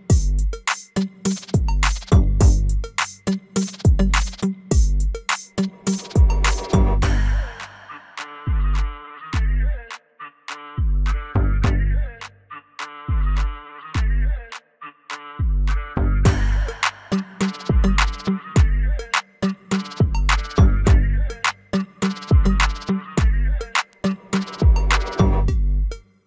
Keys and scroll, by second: 16.3 ctrl+z, 19.5 alt+x.